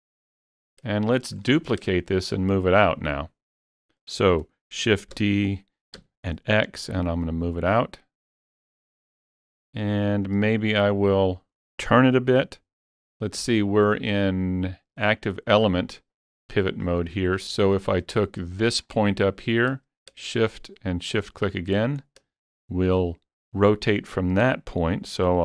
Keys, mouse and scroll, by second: 1.0 shift+middle click, 1.6 scroll up 2, 4.8 shift+middle click, 4.8-5.2 scroll up 1, 5.2 shift+d, 6.0 x, 9.7 click, 10.1 scroll up 1, 10.7 shift+middle click, 13.8 click, 15.1 click, 16.8 click, 16.8 scroll up 3, 17.3 scroll down 4, 17.5 scroll, 17.7 shift+middle click, 17.9 scroll down 1, 18.2 scroll up 1, 18.9 scroll up 3, 20.4 shift+click, 21.2 shift+click, 22.0 scroll down 3, 22.4 shift+middle click.